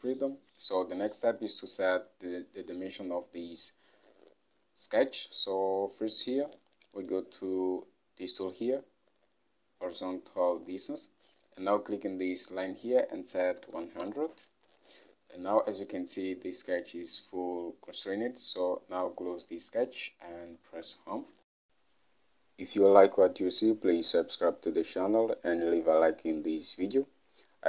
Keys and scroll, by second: 13.3-14.4 typing, 16.6 typing, 21.0 Home.